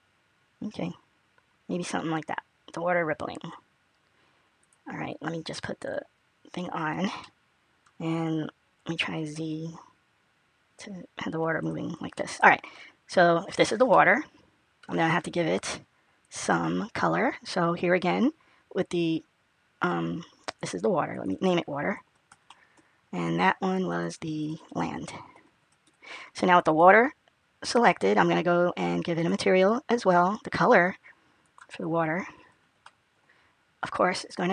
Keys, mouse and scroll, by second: 5.7 click, 7.0 middle click, 8.6 middle click, 12.0 middle click, 13.8 middle click, 17.6 click, 22.9 click, 26.0 click, 27.7 click, 30.6 click, 32.2 click.